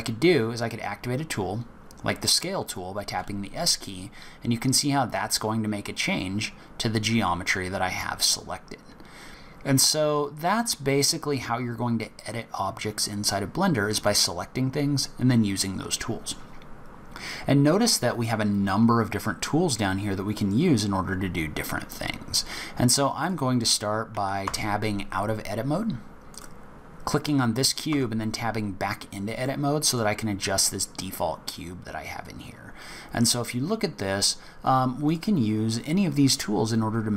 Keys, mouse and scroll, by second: 3.1 s, 14.9 scroll up 2, 16.9-18.1 scroll down 3, 22.5-23.2 scroll down 3, 23.2 click, 24.4 Tab, 26.3 click, 27.9 Tab, 28.8 scroll up 2, 29.4 middle click, 30.1-30.6 scroll up 1, 30.6 scroll down 4, 31.1 scroll up 2, 31.8-32.5 scroll up 3, 35.0 click.